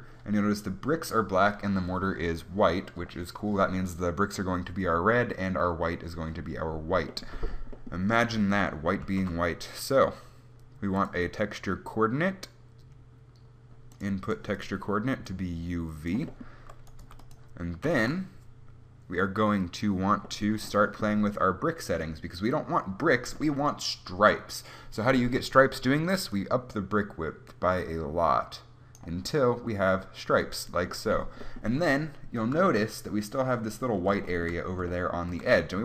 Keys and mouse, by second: 9.3 shift+a, 14.9-17.3 drag, 17.3 g, 18.1 shift+a.